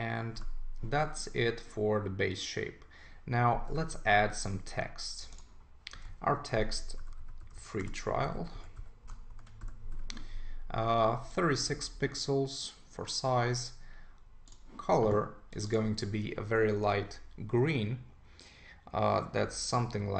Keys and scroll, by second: 6.7-9.1 typing, 9.3 super+Return.